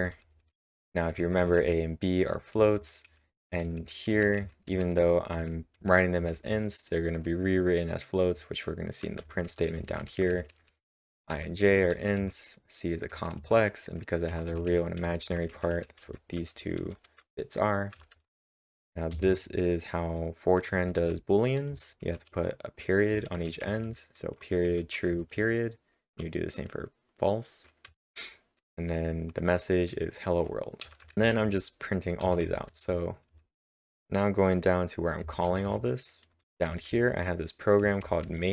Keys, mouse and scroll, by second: 0.0-1.1 typing, 2.5-7.0 typing, 8.6-9.4 typing, 11.7-12.4 typing, 18.3-19.6 typing, 27.9 typing, 30.6-35.2 typing, 36.4 Return, 36.4-37.2 typing.